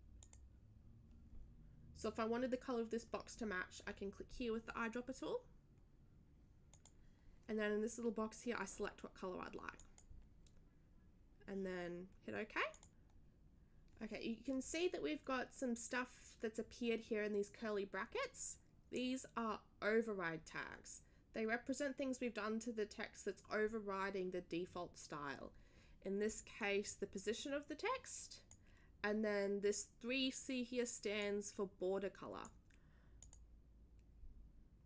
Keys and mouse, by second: 0.2 click, 6.7 click, 9.7 click, 12.7 click, 26.6-28.5 drag, 28.6 click, 31.2-32.4 drag, 33.2 click.